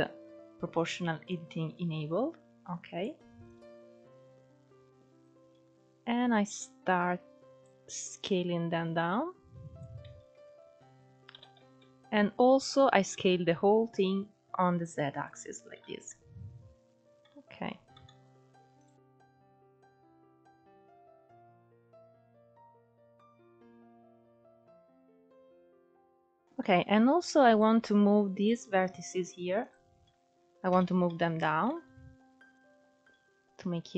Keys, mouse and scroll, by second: 1.0 click, 3.2 click, 7.8 click, 10.0 Tab, 11.0 s, 15.4 alt+z, 15.7-17.0 middle drag, 17.0 Tab, 17.6-18.4 middle drag, 18.4 click, 18.7 scroll up 4, 19.0 middle click, 19.2-20.3 drag, 20.3 KP_1, 20.5 alt+z, 20.8 click, 21.4 alt+z, 21.7 click, 22.3 Tab, 22.4 scroll down 5, 22.5-22.9 middle drag, 22.9 scroll up 2, 23.0 Tab, 23.7 alt+shift+click, 24.6 Tab, 24.7 scroll down 4, 24.9-25.8 middle drag, 25.8 Tab, 25.9-27.1 scroll up 3, 26.2 middle click, 27.1 click, 28.0 alt+shift+click, 29.3 alt+shift+click, 29.7 scroll down 2, 30.3 KP_1, 31.3 shift+middle click, 31.7-32.2 scroll up 1, 32.2 click.